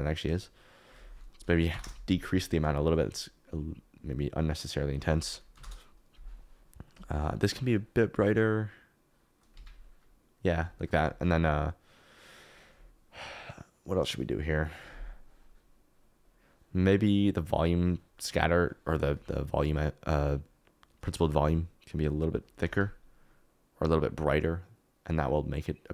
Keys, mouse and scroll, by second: 0.3-1.8 drag, 4.1-6.2 drag, 8.3-9.5 drag, 10.0 click, 16.0 click, 18.6 click.